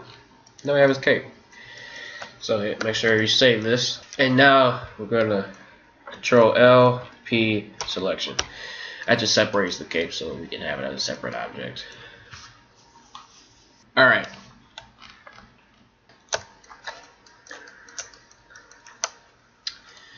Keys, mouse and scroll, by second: 1.8 middle click, 2.7 ctrl+w, 3.0 middle click, 4.1 Tab, 5.2-6.9 middle drag, 6.3 ctrl+l, 6.9 p, 8.3 Tab, 9.0 middle click, 9.5 click, 10.2 right click, 11.2 middle click, 12.8 middle click, 14.9-19.9 middle drag, 19.9 right click.